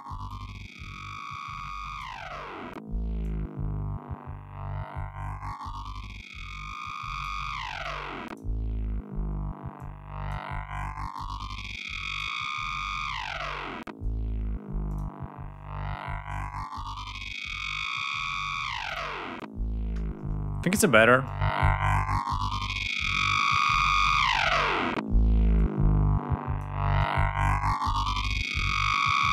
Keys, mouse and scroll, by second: 2.8-7.0 drag, 7.4 click, 9.4 click, 10.8 click, 14.5 click, 18.5 click, 20.8-23.8 drag, 25.2-26.4 drag, 26.6-28.0 drag, 28.8 click.